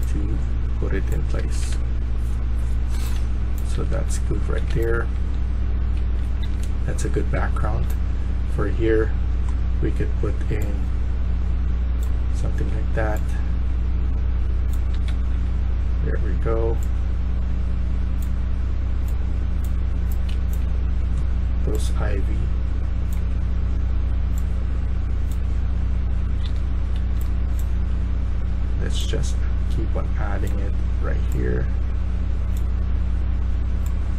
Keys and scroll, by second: 1.2 Escape, 1.6 Escape, 3.6-4.6 typing, 5.9-7.7 typing, 14.7-15.9 typing, 20.0-20.7 typing, 25.4-27.7 typing.